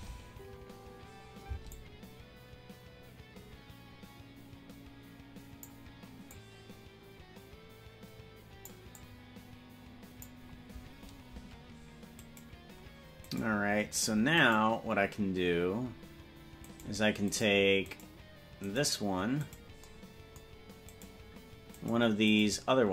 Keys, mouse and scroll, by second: 1.7 space, 6.5-8.8 drag, 9.1-10.5 drag, 12.4 right click, 13.6 right click, 14.6 right click, 17.0 right click, 17.6 right click, 18.2 right click, 19.0 right click, 19.8 right click, 21.2 right click, 22.0 right click, 22.6 right click.